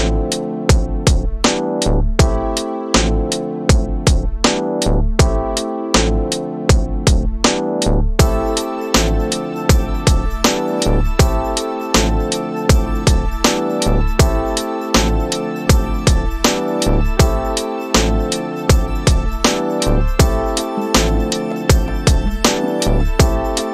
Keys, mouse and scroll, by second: 7.4-16.3 drag, 16.6 middle click, 16.8 middle click, 17.1-18.2 scroll down 11, 18.6-23.7 drag.